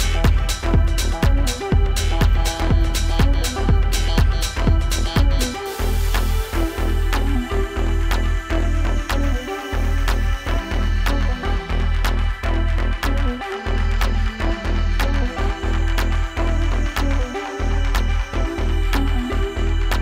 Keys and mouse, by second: 1.2-2.3 drag, 3.6-4.3 alt+drag, 8.3 alt+click, 11.1 F4, 15.0 click, 15.6 click, 17.2 alt+click, 17.9 alt+middle click, 18.3-19.0 alt+drag, 19.8 alt+click.